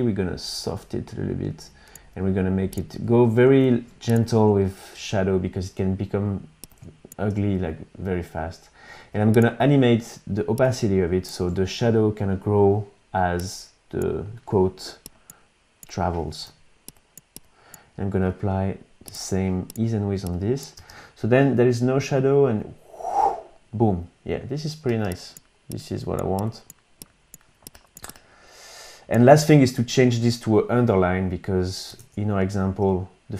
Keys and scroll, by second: 3.4 shift+é, 3.6 shift+é, 16.5 u, 20.8 space, 24.9 space, 32.0 super+Tab.